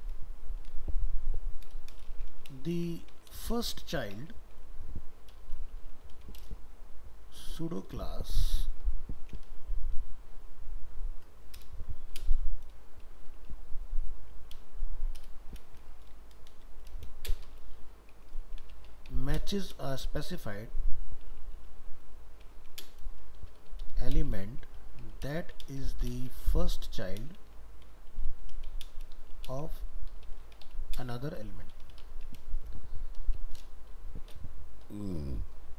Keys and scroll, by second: 15.7 ctrl+space.